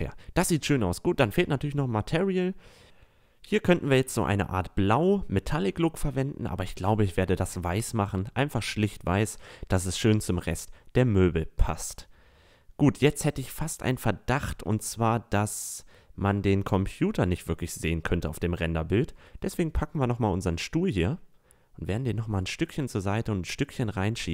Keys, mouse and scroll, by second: 3.3 a, 3.6-5.2 middle drag, 5.2 click, 7.2 right click, 9.5 middle click, 9.7 a, 11.5 middle drag, 11.7 middle click, 12.0 middle click, 12.8-16.2 right drag, 16.2 a, 16.6-17.1 middle drag, 17.4 middle click, 18.6-19.4 right drag, 20.5-22.3 drag, 22.3 a, 22.4-23.2 middle drag.